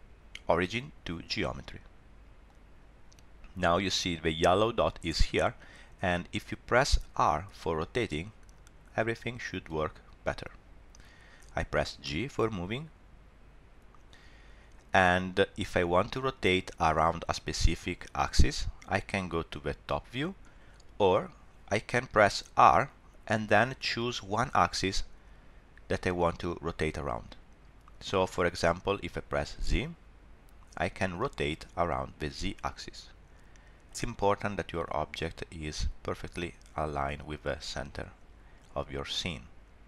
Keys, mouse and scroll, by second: 7.5 r, 12.0 g, 22.6 r, 37.4 shift+middle click.